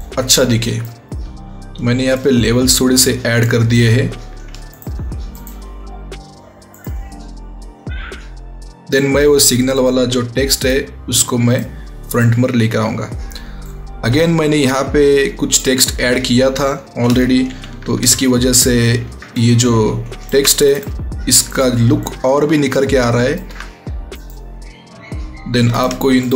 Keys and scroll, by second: 17.4 ctrl+t, 17.9 ctrl+alt+t.